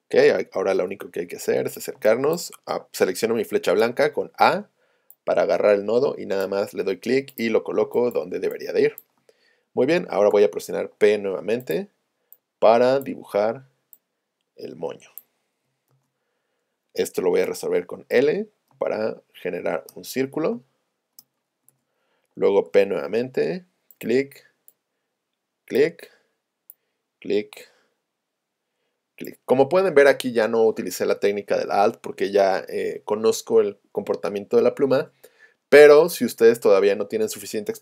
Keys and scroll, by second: 0.9 z, 3.8 a, 7.8 space, 10.3 p, 17.5 l, 18.7 space, 20.5 space.